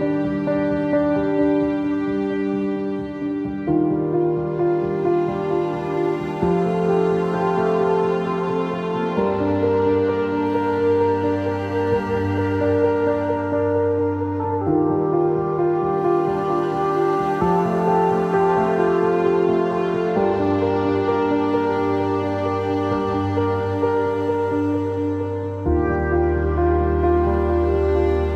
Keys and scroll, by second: 15.2 Escape, 16.7 q.